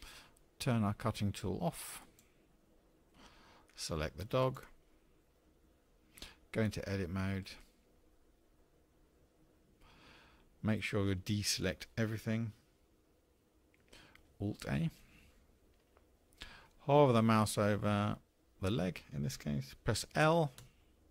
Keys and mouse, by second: 2.0 click, 4.4 click, 9.1 Tab, 15.4 alt+a.